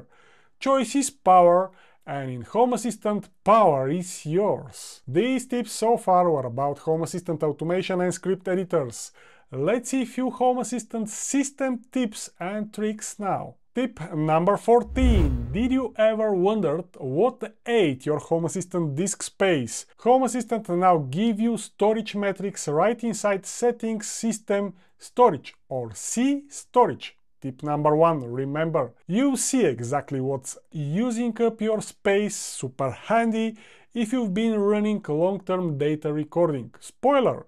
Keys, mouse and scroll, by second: 1.0 e, 25.7-27.4 typing.